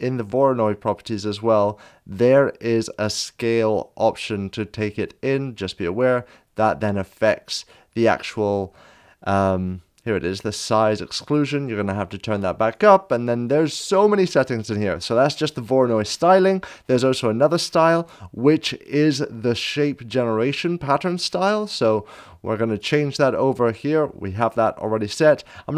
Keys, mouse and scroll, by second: 3.6 ctrl+z, 3.6 click, 3.6 scroll down 1, 10.6 click, 15.7-16.4 scroll up 1, 22.7 click, 25.5-25.7 scroll down 1.